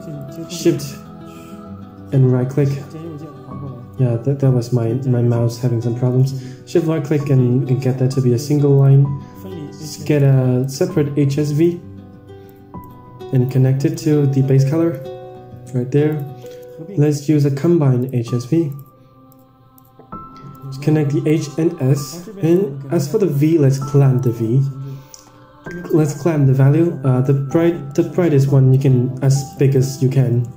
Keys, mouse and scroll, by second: 0.2 shift+right drag, 0.4-0.9 shift+right drag, 2.3-4.0 shift+right drag, 11.4 click, 12.4 click, 13.2-13.9 drag, 14.4 click, 15.4 g, 16.4 shift+a, 19.2-19.7 drag, 20.4-21.3 drag, 21.4 middle click, 21.9 shift+a, 25.9-27.6 drag, 26.8 KP_0, 28.3 click, 29.4 click, 29.7-30.5 drag.